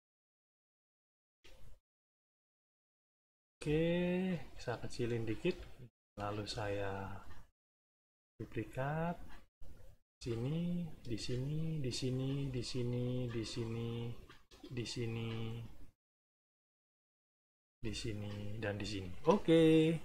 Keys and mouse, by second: 1.2 n, 1.7 click, 2.7 click, 3.5 space, 4.7 ctrl+shift+click, 5.7-7.8 ctrl+shift+drag, 6.3 space, 8.0-16.0 drag, 10.0 space, 11.0 space, 11.7 space, 13.2 space, 14.4 space, 15.6 middle click, 16.4-18.7 drag, 17.6 space, 18.8 middle click.